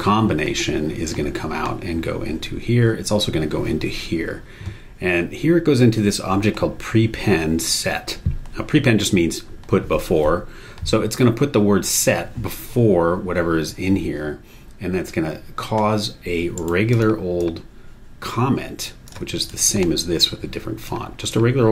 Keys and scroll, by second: 16.5 super+e.